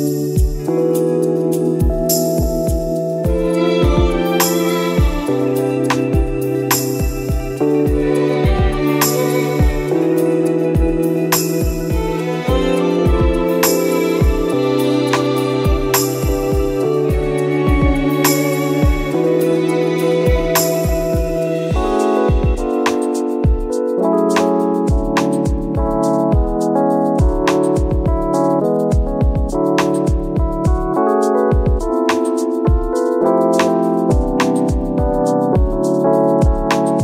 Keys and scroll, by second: 5.1 ctrl++, 10.6 space, 11.6 ctrl+-, 15.4 ctrl+d, 20.8 ctrl++, 30.2 ctrl+e, 31.8 ctrl+e.